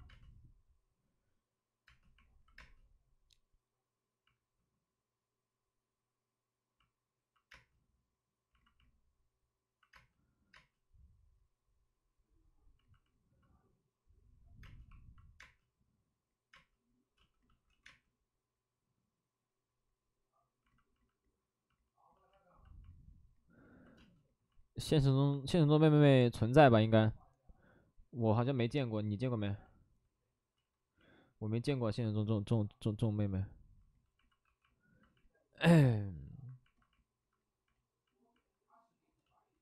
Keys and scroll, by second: 1.8 space, 2.5 space, 7.5 space, 9.9 space, 10.5 space, 14.6 space, 15.4 space, 16.5 space, 17.1 space, 17.6 ctrl+z, 17.8 space, 23.9 space, 30.5 ctrl+z, 34.4 w.